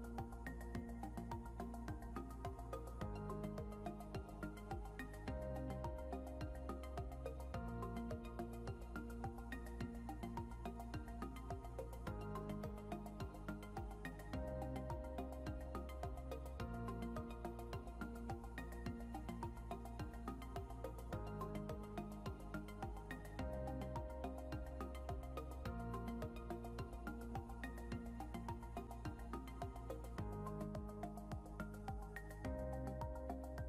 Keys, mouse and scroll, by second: 0.3 alt+Tab, 1.7 click, 3.0 ctrl+a, 6.1 click, 9.5 click, 12.4 click, 14.3 click.